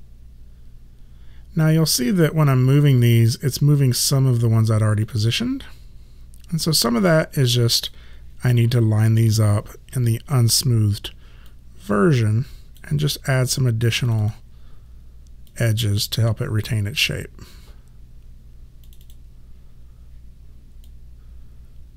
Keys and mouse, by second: 5.1 click, 10.1 1, 11.5 click, 14.1 click, 18.9 click.